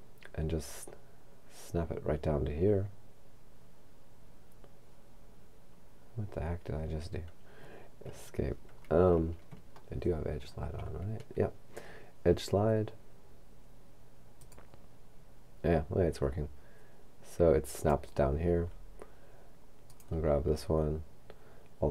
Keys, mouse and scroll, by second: 8.1 Escape, 9.2-9.9 scroll up 2, 9.9 shift+middle click, 14.4 click, 17.8 click, 19.9 right click.